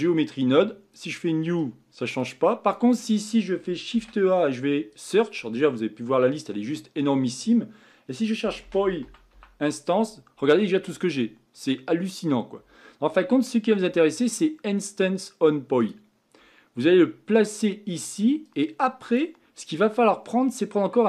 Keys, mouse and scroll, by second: 0.0 click, 1.0-15.9 drag.